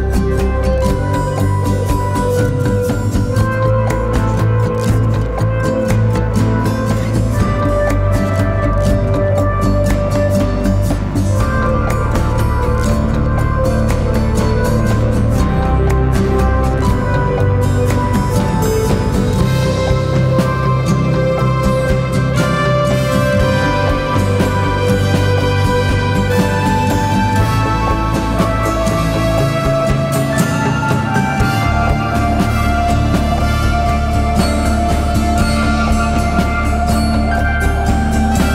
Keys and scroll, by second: 1.2 Escape, 4.3 Escape, 8.9 ctrl+z, 9.6 Escape, 12.4 Escape, 15.0 Escape, 19.0 Delete, 19.7 Delete, 26.0 Delete, 26.9 ], 28.3 ], 36.6 4.